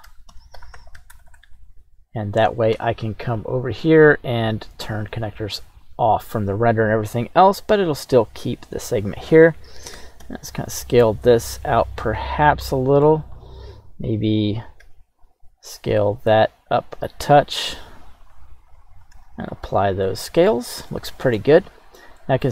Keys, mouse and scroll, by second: 1.3 Return, 4.9 click, 5.7 click, 7.2-8.1 scroll up 1, 8.1 right click, 8.9-10.0 right drag, 10.0 s, 10.2 x, 12.1 click, 12.4-12.7 scroll down 2, 12.7 middle click, 13.4-14.8 right drag, 14.8 s, 16.8 click, 17.7 ctrl+a, 18.8 right click, 19.1 ctrl+a, 20.0-20.6 alt+middle drag, 20.5 scroll down 1, 20.9-21.4 shift+middle drag, 22.2 middle click.